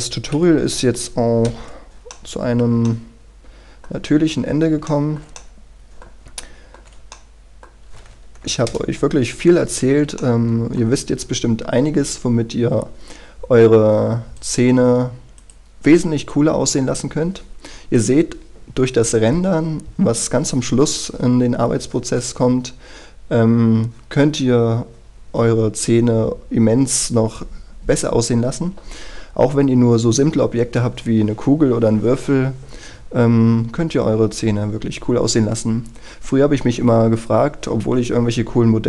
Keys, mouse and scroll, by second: 0.6 KP_Decimal, 1.7 shift+c, 2.3-4.2 middle drag, 4.2-4.8 scroll up 1, 5.0 shift+middle click, 6.6 shift+middle click, 7.3-8.5 middle drag, 8.9 KP_0, 9.6 scroll up 1, 10.4 shift+middle click, 11.2-14.6 scroll down 1, 14.6 right click, 15.6-18.5 drag, 29.5-30.4 scroll up 1, 30.6-38.8 scroll down 1.